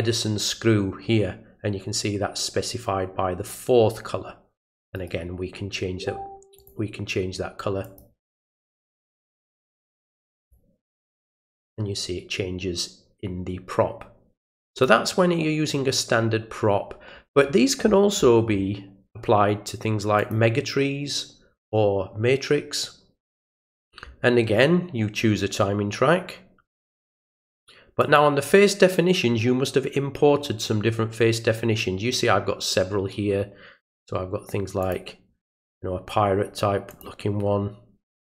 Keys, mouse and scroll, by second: 4.9 right click, 6.6 click, 7.8 click, 9.3 click, 10.4 click, 14.7 click, 17.4 middle click, 17.9 middle click, 18.2 middle click, 20.2 click, 28.0 click, 34.8 click, 36.9 click.